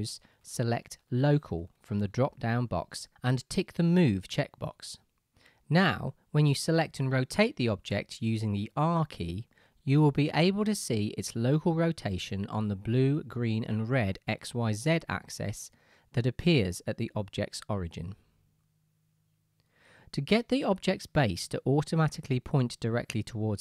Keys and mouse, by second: 7.0 r, 8.5 r, 10.0 r, 11.3 r, 13.8 ctrl+z, 14.1 ctrl+z, 14.4-23.6 ctrl+right drag, 14.6 ctrl+z, 15.1 ctrl+z.